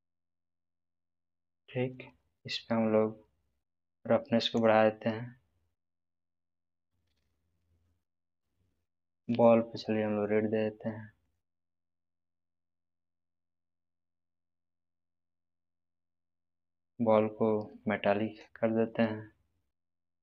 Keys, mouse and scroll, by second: 1.7-2.3 scroll down 1, 4.0 click, 4.0-4.6 drag, 7.3-8.2 middle drag, 9.3 click, 9.8-10.4 middle drag, 11.2-15.6 drag, 16.9-18.3 scroll down 1, 18.4-20.2 drag.